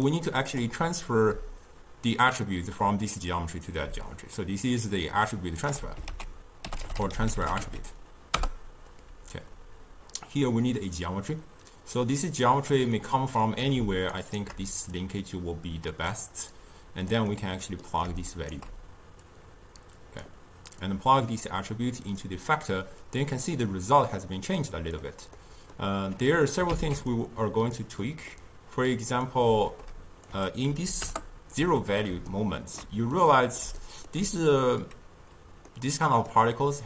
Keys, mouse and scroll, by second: 0.1 d, 0.3 click, 0.7-1.6 d, 4.2-5.8 right drag, 5.8 d, 6.2 ctrl+a, 13.0-14.2 middle drag, 14.2-15.0 shift+right drag, 15.0-16.7 drag, 17.4-18.4 middle drag, 18.4-19.4 shift+right drag, 19.4-21.0 drag, 23.1-24.5 drag, 24.5-26.4 middle drag, 26.4 click, 26.8 ctrl+x, 27.2 click, 28.1 middle click, 29.0-32.4 drag, 32.4-36.8 shift+middle drag.